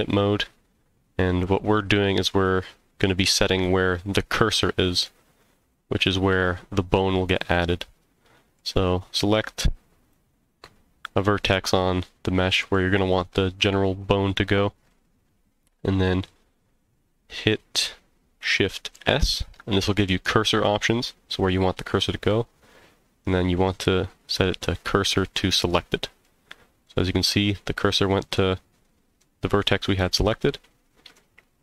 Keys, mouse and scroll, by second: 4.2 middle click, 7.4-8.6 middle drag, 10.0 click, 11.6-12.7 middle drag, 18.9 shift+s, 26.2 middle click, 27.6-28.3 scroll up 3, 28.3 middle click, 29.9 scroll down 2, 30.4 middle click, 31.3 scroll down 2.